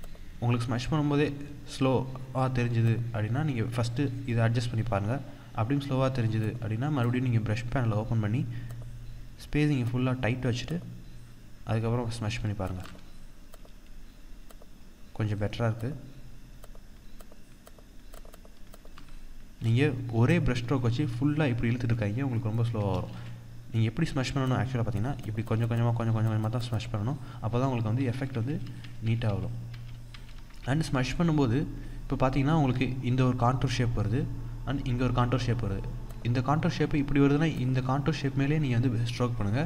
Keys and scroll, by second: 12.4 ctrl+=, 12.5 ctrl+space, 22.8 ctrl+z, 27.7 ctrl+z, 29.3 ctrl+z, 39.5 ctrl+z.